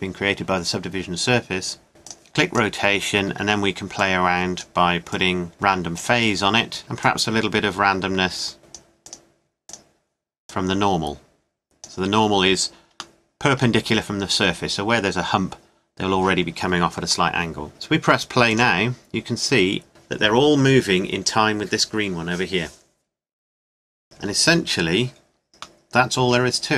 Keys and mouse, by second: 2.1-6.6 drag, 7.0-8.6 drag, 9.0-11.9 drag, 12.2-13.2 middle drag, 18.5-19.8 drag.